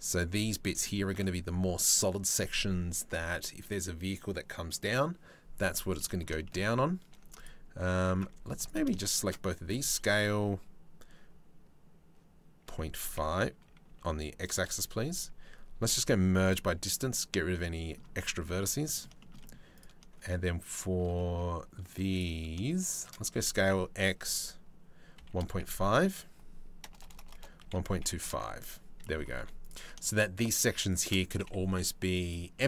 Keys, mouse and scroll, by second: 0.4 shift+middle click, 5.5 middle click, 6.0 shift+middle click, 7.0 alt+middle click, 7.9 2, 8.2 click, 9.3 s, 14.6 a, 15.5 m, 17.1 middle click, 18.2 middle click, 18.8 shift+middle click, 19.3 click, 19.6 shift+middle click, 20.7 middle click, 21.7 click, 22.4 shift+click, 22.9 s, 28.6 middle click, 28.9 3, 29.2 middle click, 31.2 Delete, 32.1 middle click.